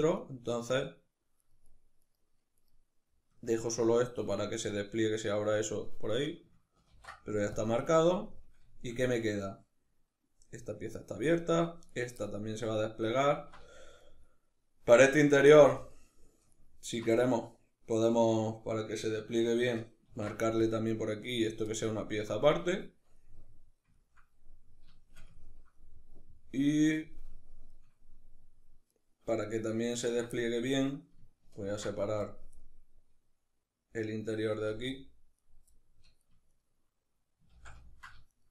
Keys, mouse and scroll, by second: 0.1 shift+right click, 1.0 shift+right click, 1.3 shift+right click, 1.7 shift+right click, 2.2 shift+right click, 6.6 ctrl+e, 7.6-11.6 middle drag, 11.6 right click, 11.8-15.4 middle drag, 15.4 alt+right click, 16.2 alt+shift+right click, 16.9-28.6 middle drag, 19.7 ctrl+e, 28.6 right click, 29.1 ctrl+right click, 29.6 ctrl+right click, 30.0-35.0 middle drag, 31.3 ctrl+e, 34.3 z, 35.0 right click, 35.4 middle click, 36.2 shift+right click, 37.2 ctrl+z, 37.4 ctrl+middle click, 38.0 shift+right click.